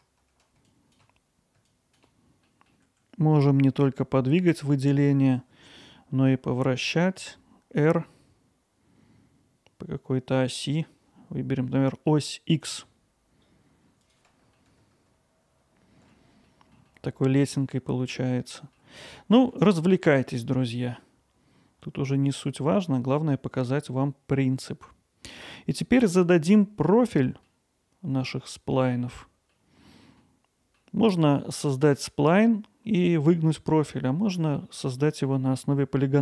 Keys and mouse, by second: 0.1 click, 0.4 middle click, 0.7 click, 1.1 g, 1.4 click, 1.4 g, 1.5 middle click, 1.7 alt+middle click, 1.9 ctrl+alt+middle click, 2.5 click, 14.1 click, 14.6-16.8 alt+middle drag, 16.9-18.8 alt+middle drag, 19.6-20.2 alt+middle drag, 20.8-25.7 middle drag, 26.0 middle drag, 27.1-27.5 middle drag, 29.5-29.8 middle drag, 30.2-30.8 middle drag, 31.6-31.9 middle drag, 33.9-34.6 middle drag, 35.0 middle drag, 35.5 middle drag.